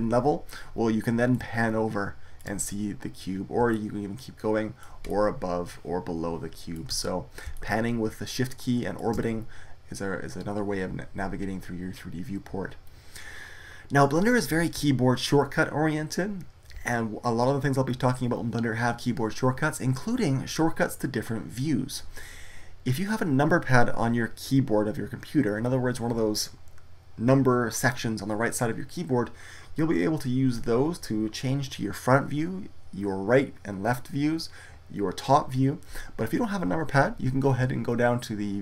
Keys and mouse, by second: 1.3-5.5 middle drag.